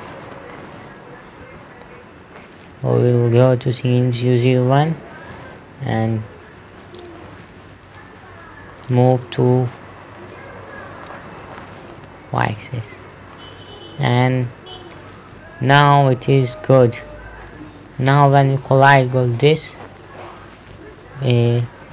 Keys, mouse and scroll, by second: 0.0-0.4 typing, 1.9 Escape, 3.0 click, 8.5 click, 10.6 p, 18.9-20.1 typing, 21.2-21.9 typing.